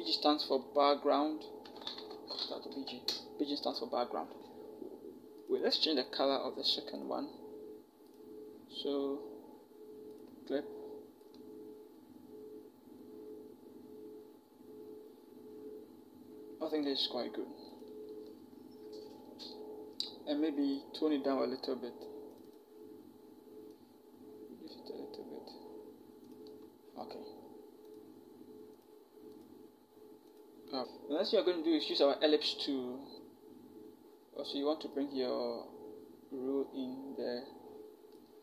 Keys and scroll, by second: 1.4 BackSpace, 1.7 BackSpace, 1.7 BackSpace, 1.9 BackSpace, 2.5 Caps_Lock.